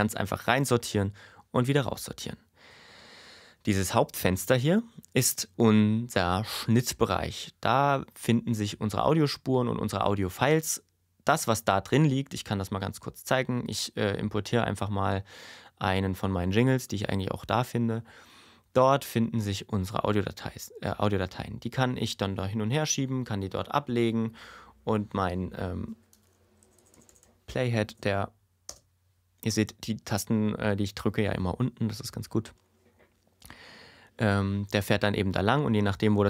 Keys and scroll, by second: 26.4 Left, 28.7 space.